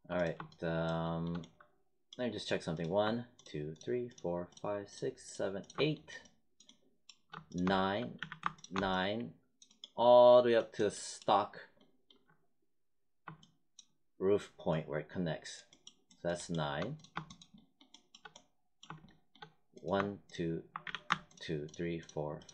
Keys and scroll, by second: 8.1 z, 20.8 z.